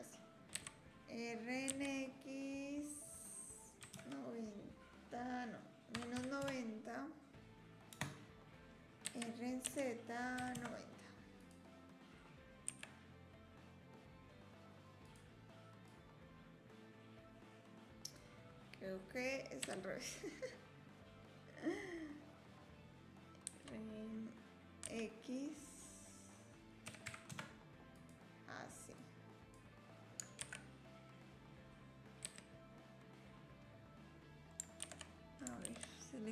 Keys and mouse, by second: 0.5 r, 9.0 r, 12.7 s, 16.0-18.2 drag, 19.6 r, 29.0 click, 30.4 shift+d, 34.8 ctrl+z, 35.7 ctrl+z.